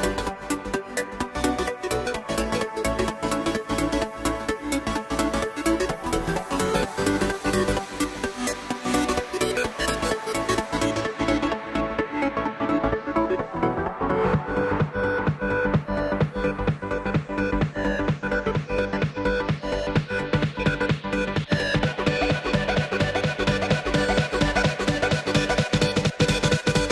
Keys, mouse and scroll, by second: 3.4 click, 5.4 click, 5.9 click, 6.7 click, 7.2 KP_1, 7.7 scroll up 1, 7.9 shift+middle click, 8.3 s, 9.7 click, 10.0-10.7 scroll down 2, 10.7 click, 11.1 click, 11.5-12.3 drag, 12.3-12.6 scroll up 1, 12.6-13.0 shift+middle drag, 13.0-14.0 scroll up 1, 14.0 x, 14.4 shift+a, 16.5-17.1 scroll down 2, 17.1-19.1 drag, 21.2-23.6 drag, 23.6-24.1 scroll up 2, 24.1-26.2 middle drag, 26.2 Tab, 26.7 Tab.